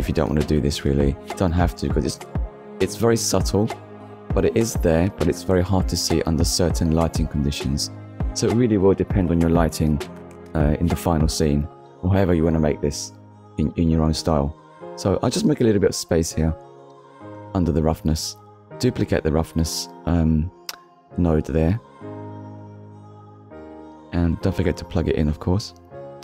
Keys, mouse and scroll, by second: 1.8 shift+middle click, 4.3 middle click, 4.9-5.3 scroll up 1, 5.8 middle click, 6.4-6.8 scroll down 1, 7.0 click, 7.5-7.9 scroll down 1, 8.0 middle click, 8.9-9.3 scroll up 1, 10.6 click, 13.0 click, 16.5 click, 18.6 shift+d, 19.8 click, 20.1-20.5 scroll down 2, 20.8-21.2 scroll up 1, 21.4 click, 23.0 middle click, 23.7 middle click, 24.8 click, 26.1 middle click.